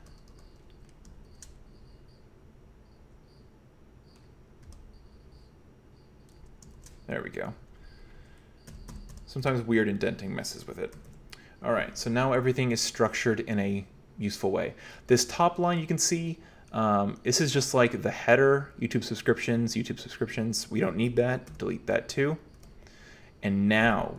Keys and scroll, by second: 0.0-0.5 typing, 4.7 l, 6.8-11.5 typing, 21.5 d, 22.6 d.